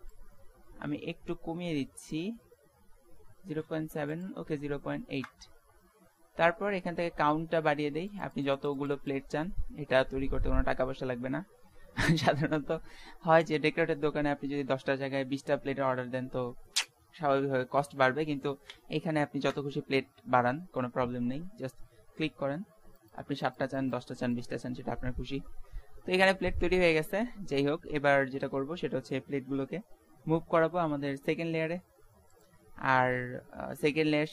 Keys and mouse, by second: 0.1-1.9 drag, 1.9 middle click, 4.1-6.0 drag, 6.0 middle click, 8.1-10.9 middle drag, 23.0-26.1 drag, 30.1 m.